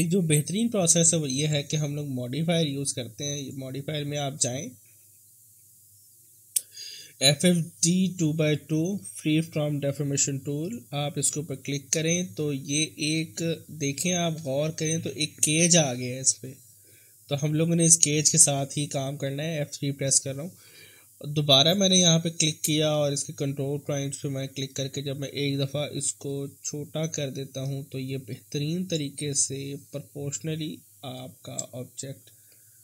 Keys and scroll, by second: 6.5 f, 15.1 F3, 19.2 F3.